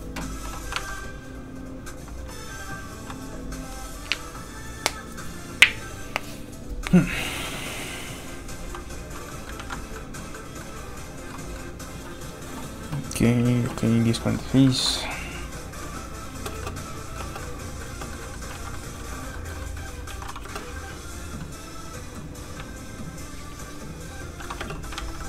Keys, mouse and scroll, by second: 0.7 alt+Tab, 1.6 alt+click, 8.6 click, 9.3 middle click, 9.6 ctrl+s, 9.9 middle click, 14.6 shift+middle click, 14.9 middle click, 15.0 middle click, 16.3 space, 16.6 middle click, 17.4 middle click, 18.1 middle click, 18.1 space, 18.2 shift+middle click, 18.5 alt+shift+z, 19.4 shift+middle click, 19.6 middle click, 19.7 middle click, 20.1 alt+shift+z, 20.4 space, 22.3 click, 23.5 shift+click, 24.6 click, 24.8 alt+middle click, 24.9 alt+shift+z, 25.2 alt+shift+middle click.